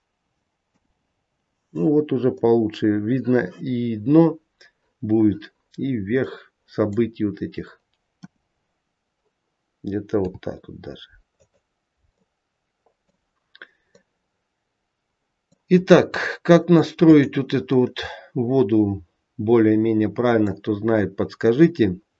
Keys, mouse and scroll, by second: 0.6 KP_0, 1.7-2.3 scroll up 3, 2.3 middle click, 3.5-4.3 scroll down 1, 4.3-5.2 scroll down 2, 6.2 middle click, 7.0-8.1 scroll down 3, 8.1 KP_0, 10.1 g, 12.1 middle click, 13.2-13.8 scroll down 2, 13.8 middle click, 13.8-15.0 scroll down 1, 15.7-16.1 scroll up 2, 16.1 middle click, 17.0 click, 17.4 scroll down 1, 17.7 middle click, 21.1-22.1 scroll down 1.